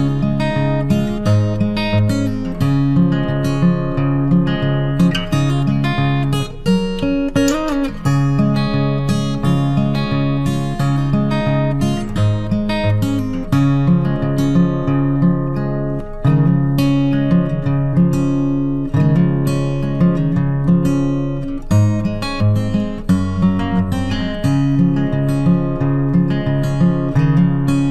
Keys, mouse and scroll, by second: 8.5 click, 12.1 click, 16.5 click, 18.6 KP_6, 19.7 click, 22.3 v, 25.9 click.